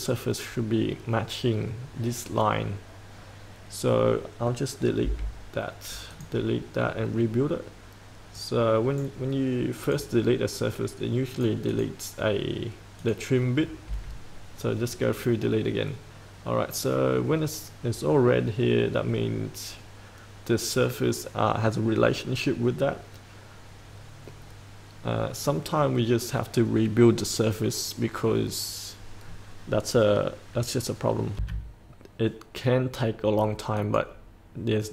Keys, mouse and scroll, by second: 3.1-4.8 scroll down 1, 4.8 scroll up 1, 6.1 click, 7.2-8.4 scroll down 1, 8.4 right click, 9.8 click, 13.6 scroll up 1, 31.3 F8, 33.8 click.